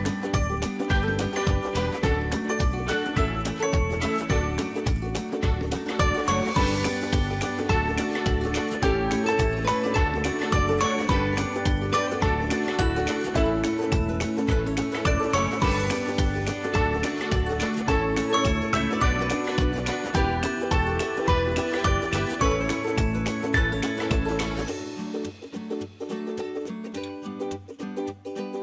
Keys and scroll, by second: 7.2 BackSpace, 11.7 ctrl+0.